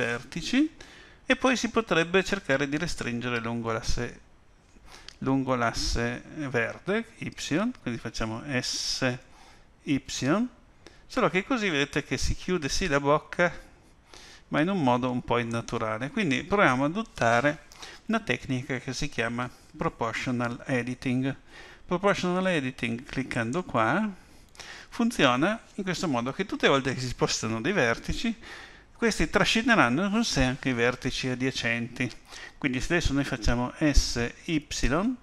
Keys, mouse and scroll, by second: 0.0 middle click, 9.2 s, 23.3 click, 33.8 s.